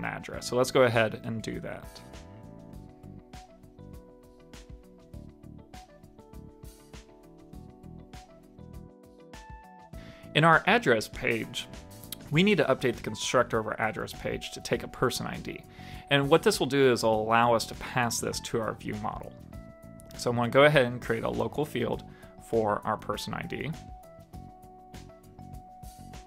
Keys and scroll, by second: 8.8 super+s, 14.5 alt+shift+Left, 20.0 Escape, 22.2 super+s, 22.7 super+Left, 23.4 alt+Return.